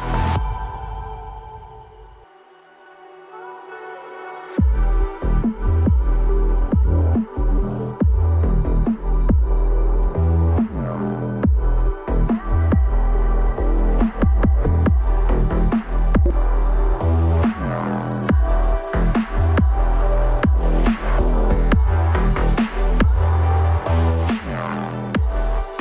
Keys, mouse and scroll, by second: 2.6 right click, 5.8 right click, 10.9 right click, 12.8 right click, 16.1 ctrl+a, 16.7-19.9 typing.